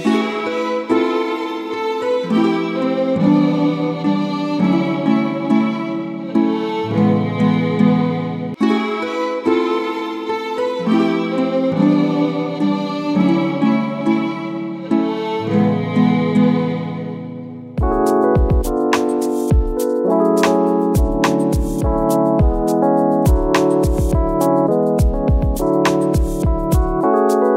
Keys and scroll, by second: 0.0 ctrl++, 0.1 ctrl+-, 0.3 space, 2.0 ctrl+e, 3.3 space, 11.5 ctrl+z, 11.6 F1, 11.9 space, 19.0 ctrl+z, 22.0 ctrl+z, 26.5 space.